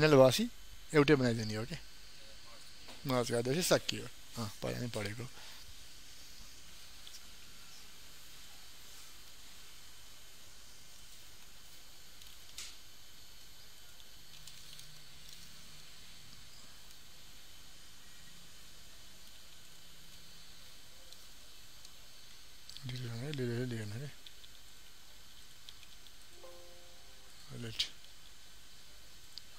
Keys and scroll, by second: 6.6 ctrl+a.